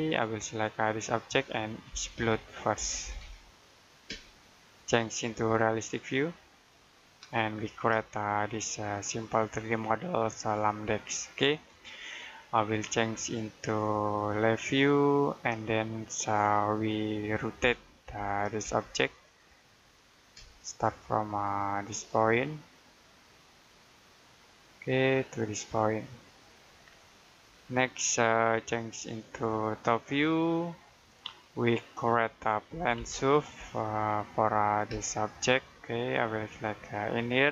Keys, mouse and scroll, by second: 0.7 click, 1.8 e, 3.0-4.0 typing, 5.2 click, 7.3-7.9 scroll down 1, 8.0 shift+middle click, 11.7 middle click, 13.4 click, 15.9-16.5 scroll down 1, 16.5 middle click, 17.5 typing, 18.5 space, 19.0 click, 20.2 space, 24.2 click, 26.7 scroll down 1, 27.0 middle click, 28.8 click, 31.0-31.6 scroll down 1, 31.6 middle click, 32.6 p, 35.3-35.7 scroll down 1, 35.7 middle click, 36.7 click.